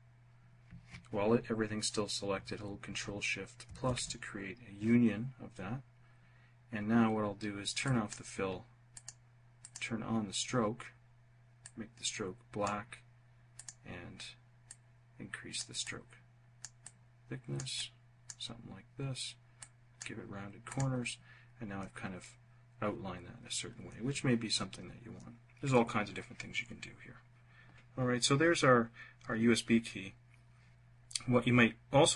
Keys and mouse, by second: 2.9 ctrl+shift+=, 7.1 click, 8.2 click, 8.9 click, 10.9-12.0 drag, 12.8 click, 13.9 click, 15.1 click.